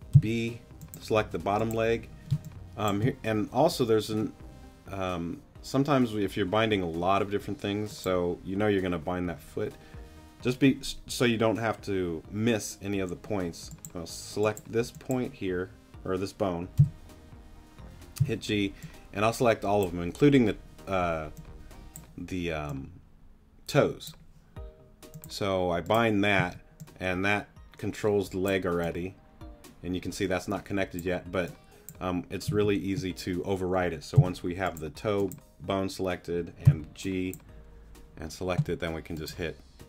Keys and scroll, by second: 0.1 b, 2.3 space, 16.8 b, 18.2 g, 26.4 z, 32.5 super+z, 34.1 b, 36.6 g.